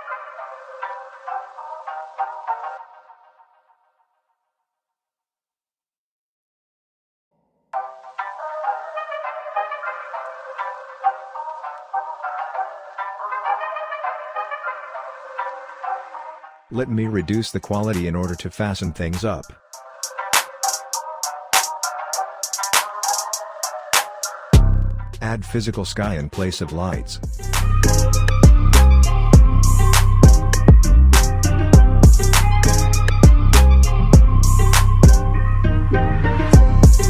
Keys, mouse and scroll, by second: 13.0 scroll down 1, 15.3 click, 16.3-17.5 scroll up 1, 17.5 click, 27.4 click, 34.4 scroll down 1, 35.1 7.